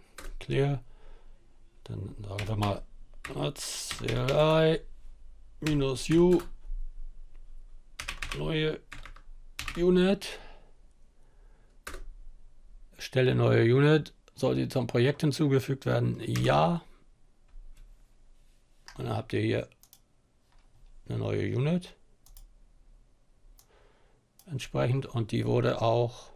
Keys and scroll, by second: 1.0-5.2 typing, 6.7-9.1 typing, 10.5-11.2 typing, 15.2 typing.